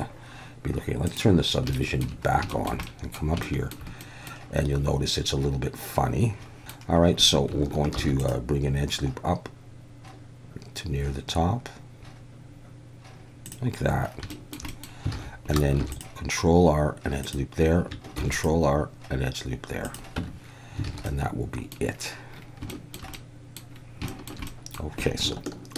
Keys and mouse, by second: 1.1 click, 1.8 shift+middle click, 2.6 shift+middle click, 2.9 middle click, 3.5 shift+middle click, 4.1 middle click, 6.2 Tab, 7.9 ctrl+r, 13.5 click, 14.4 shift+middle click, 14.8 middle click, 15.1 alt+a, 15.8 ctrl+r, 17.2 click, 18.2 ctrl+r, 19.8 click, 20.2 Tab, 20.9 alt+a, 21.1-21.7 middle drag, 22.7 shift+middle drag, 23.1-23.6 middle drag, 24.1 shift+middle drag, 24.5 middle click.